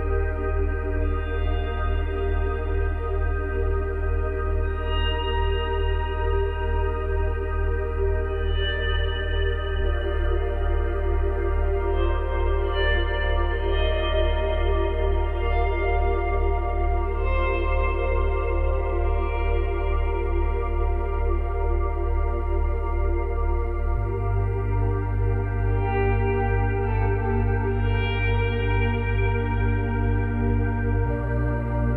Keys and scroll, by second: 4.6 space, 7.8 space, 9.2 space, 9.9 space, 10.1 ctrl+z, 11.2 ctrl+z, 14.4 space, 15.0 space, 16.5 space, 17.2 space, 17.5 ctrl+z, 18.2 space, 21.8 space, 24.8 space, 28.7 space, 31.2 space.